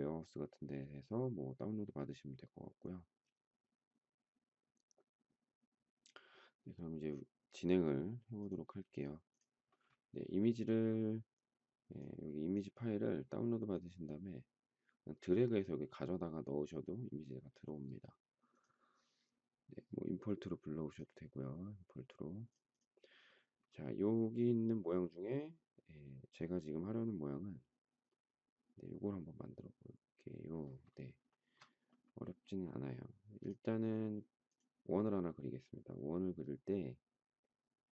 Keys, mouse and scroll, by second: 31.2 shift+middle click.